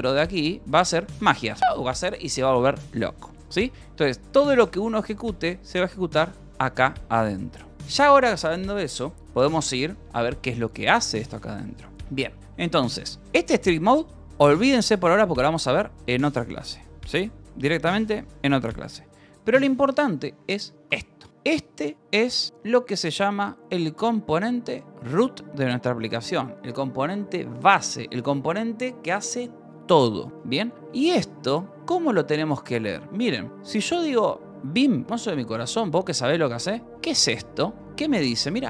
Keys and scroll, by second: 0.0-2.1 typing, 4.2 u, 8.1 ctrl+s, 9.4 ctrl+shift+6, 9.6 j, 10.2 j, 11.9 Escape, 12.4 k, 13.6 shift+v, 15.6 Escape, 19.7 Escape, 21.3 shift+v, 23.3 Escape, 26.8 Escape, 30.9-32.4 typing.